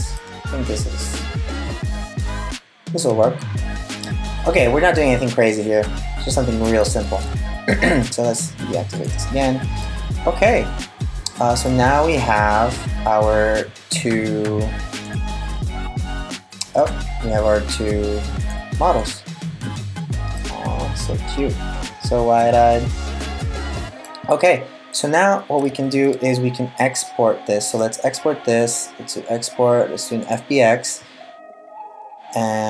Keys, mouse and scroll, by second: 6.7 super+s, 7.6 right click, 8.6 click, 9.4 middle click, 14.7 click, 16.4 click, 18.0 click, 18.6 click, 20.0 middle click, 24.5 right click, 25.3 super+s, 27.2 click.